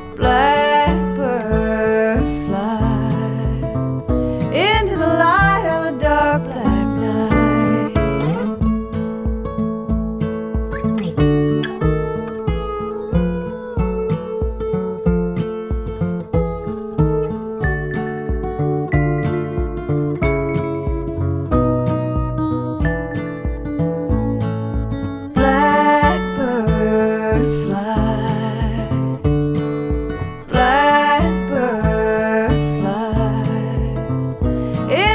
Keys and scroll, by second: 11.5 x.